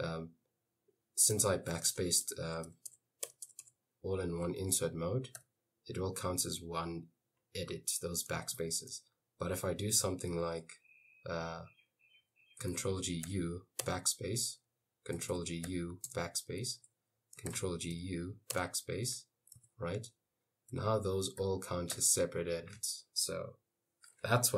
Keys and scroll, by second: 1.4-3.7 typing, 4.7 Escape, 5.4 u, 8.6 shift+a, 12.8 ctrl+g, 13.3 u, 13.9 ctrl+g, 15.7 u, 16.1 ctrl+g, 18.0 u, 18.6 ctrl+g, 20.8 Escape, 20.8 u, 21.4 u, 22.0 u.